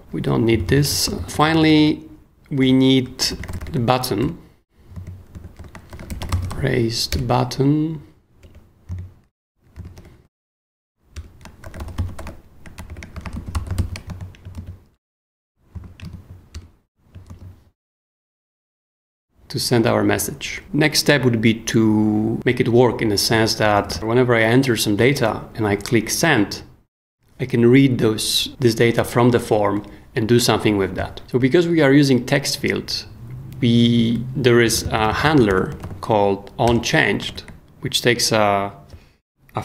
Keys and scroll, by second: 0.5 super+d, 0.9 super+d, 1.0 super+s, 1.2 j, 2.6-7.0 typing, 4.2 shift+Return, 4.8 Return, 5.0 super+Escape, 7.1 Return, 8.4 Return, 8.9 super+Return, 9.7-14.2 typing, 11.1 Return, 14.5 shift+super+s, 15.7 k, 16.0 super+., 16.5 super+Return, 17.3 super+s, 23.6-24.4 typing, 34.7 k, 35.5 shift+o, 35.8 n, 36.6 Return, 37.2 shift+Return, 37.2 shift+9.